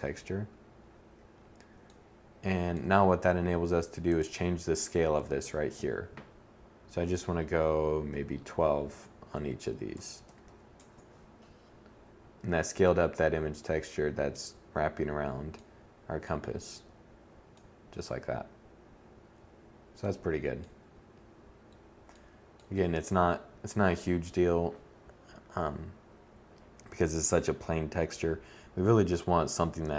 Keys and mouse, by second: 24.1-26.6 middle drag.